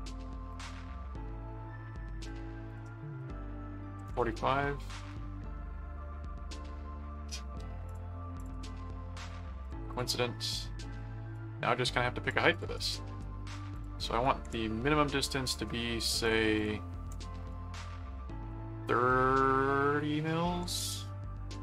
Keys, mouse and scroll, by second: 0.5 click, 2.2 click, 6.6 middle click, 7.9 ctrl+click, 9.6 click, 10.5 middle click, 11.3 click, 12.5 click, 12.7 right click, 13.7 shift+click, 15.5 shift+click, 16.2 click.